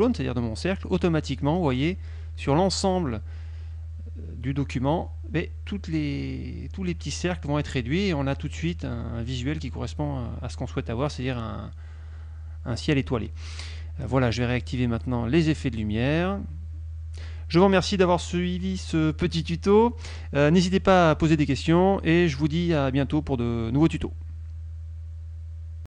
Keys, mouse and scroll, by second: 3.4 ctrl+shift+click, 3.9-5.9 ctrl+shift+scroll down 2, 6.2 ctrl+shift+click, 6.8 KP_Subtract, 8.2 click, 9.0 click, 10.0 click, 12.4 ctrl+KP_5.